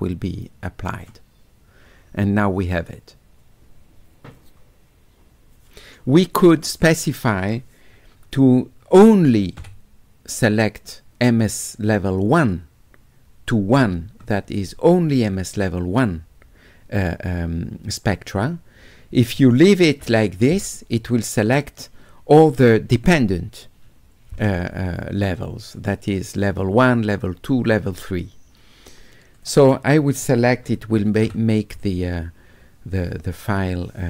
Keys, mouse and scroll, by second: 1.0 click, 7.1 click, 29.4 click.